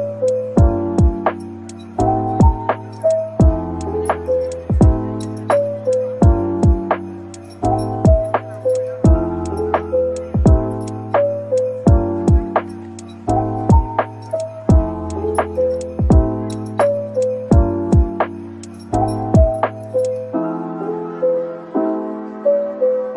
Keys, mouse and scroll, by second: 0.1 right click, 0.8 typing, 3.0 typing, 7.7 typing, 9.3 typing, 10.8 ctrl+b, 15.9 typing, 18.8 typing, 19.5 right click, 20.3-21.2 typing.